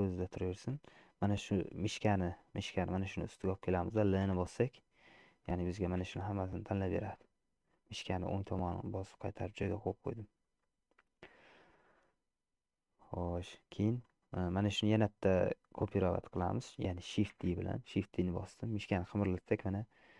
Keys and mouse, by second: 0.0 middle click, 4.5 l, 6.1 g, 9.9-11.3 middle drag, 13.1 middle click, 14.4 middle click, 15.4 middle click, 17.6 shift+d.